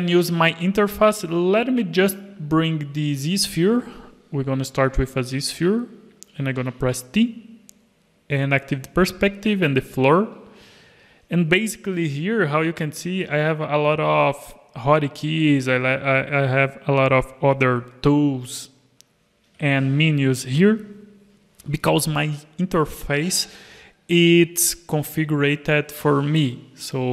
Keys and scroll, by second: 6.6 t, 12.0 alt+a, 12.1 alt+a, 13.1 alt+a, 17.9 t.